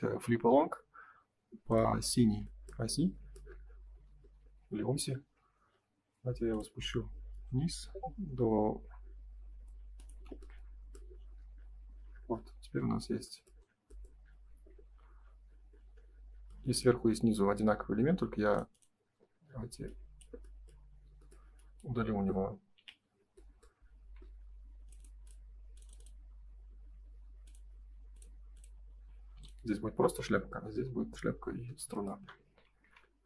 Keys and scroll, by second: 4.9 m, 11.7 space, 22.7 Delete, 24.0 Escape, 27.2 Escape, 29.3 m, 30.2 Escape, 30.7 space, 32.4 Escape.